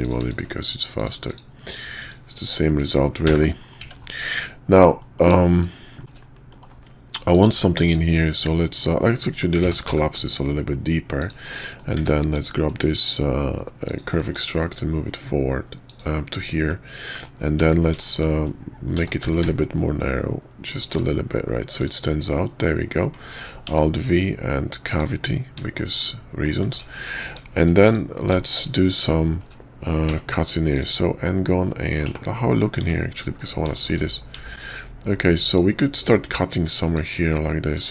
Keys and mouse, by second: 0.3 shift+click, 0.9 shift+click, 1.3 shift+click, 1.9 shift+click, 3.2 f, 3.6 middle click, 3.8 Tab, 5.0 middle drag, 5.4 shift+middle click, 6.0 middle click, 6.5 middle click, 7.3 click, 7.5 Tab, 7.8 click, 8.6 middle click, 9.6 g, 11.6 middle click, 12.0 q, 16.6 `, 17.1 KP_5, 18.0 shift+drag, 18.9 s, 21.3 middle click, 21.8 click, 22.3 middle click, 22.7 KP_5, 23.7 alt+v, 25.6 shift+click, 26.0-26.4 drag, 26.6 `, 26.9 KP_5, 27.4 shift+drag, 27.8 click, 28.4 shift+drag, 29.2 shift+drag, 30.0 d, 32.0 /, 32.8 `, 33.3 KP_5, 33.7 shift+drag, 34.4 shift+click, 35.5-37.0 drag.